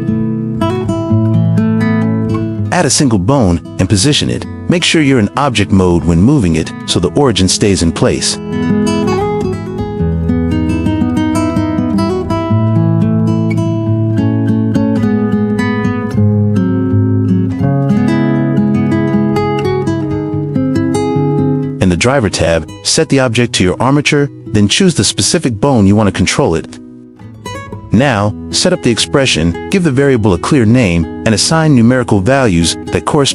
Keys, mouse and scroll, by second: 0.0 click, 0.2-1.6 drag, 1.8 t, 2.4 shift+a, 4.5 g, 6.4 click, 6.8 shift+middle drag, 7.4-7.7 middle drag, 7.9 shift+middle drag, 8.4 `, 8.8 `, 10.0-12.7 typing, 12.8 middle click, 14.0 right click, 15.1 click, 15.4-17.1 drag, 17.3 g, 18.2 click, 19.6 shift+middle click, 20.6-20.9 shift+middle drag, 21.8 click, 22.9 click, 23.9 click, 24.8 click, 26.5 click, 27.0 click, 28.3-33.3 drag.